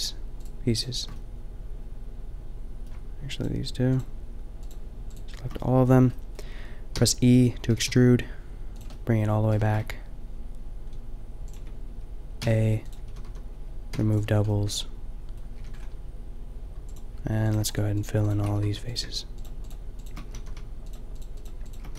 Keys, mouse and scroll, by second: 1.0 middle click, 1.2-2.2 middle drag, 6.9 e, 7.7 g, 9.0-10.1 middle drag, 9.5 g, 12.4 s, 13.1 a, 13.2 a, 13.9 w, 14.7 middle click, 15.6 a, 16.8-18.5 drag, 18.5 f, 18.7 a, 20.3 f, 20.4 a.